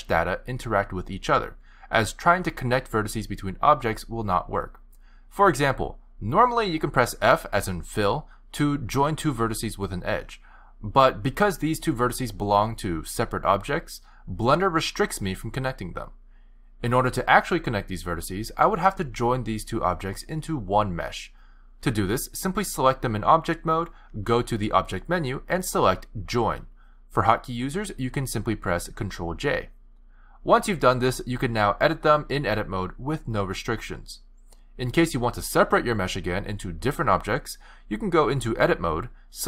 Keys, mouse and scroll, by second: 0.5 shift+click, 2.8-4.2 f, 5.5-6.1 typing, 8.7 f, 9.3 click, 9.7 shift+click, 10.0 f, 10.9 click, 11.4 shift+click, 11.9-14.9 typing, 17.7 click, 24.0 click, 27.8 ctrl+z, 28.7 ctrl+j, 30.8 click, 32.9 f, 36.7 click, 37.5 shift+click, 37.8 shift+click, 38.2 shift+click, 38.5 shift+click, 38.9 shift+click.